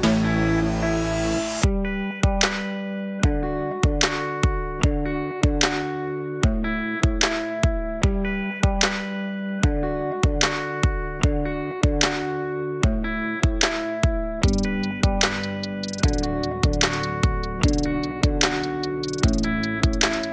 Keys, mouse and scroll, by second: 0.6 scroll down 3, 1.4 z, 2.6 alt+click, 3.5-4.1 scroll up 2, 4.9 ctrl+Tab, 6.6 KP_7, 7.3-7.8 scroll up 3, 7.8-8.7 scroll down 1, 9.4-11.9 drag, 16.6-20.3 drag.